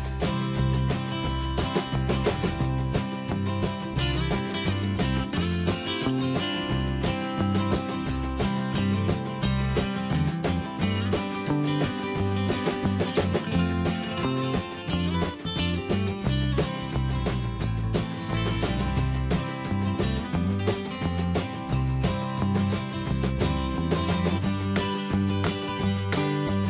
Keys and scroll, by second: 9.6 ctrl+x, 11.0 ctrl+b, 20.1 Tab.